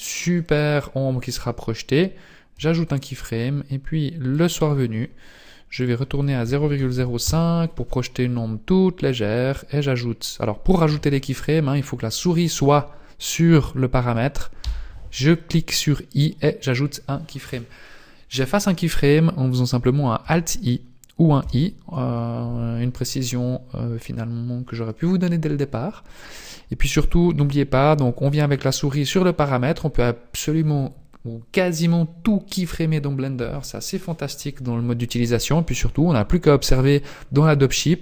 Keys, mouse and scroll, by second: 2.5 i, 4.3 click, 5.8 click, 14.6 i, 20.2 alt+i, 21.4 i, 36.9 click.